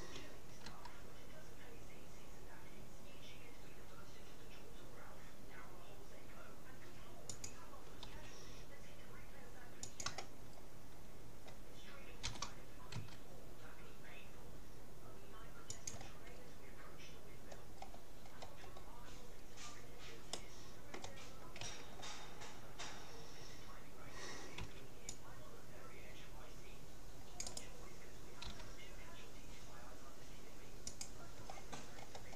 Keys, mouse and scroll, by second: 0.7 r, 8.1 g, 10.7-12.3 middle drag, 12.3 g, 16.5 middle click, 17.9-18.3 scroll up 1, 19.5-20.3 scroll up 1, 20.3-21.9 middle drag, 21.7 a, 24.7 c, 28.5 g, 31.5-32.3 middle drag.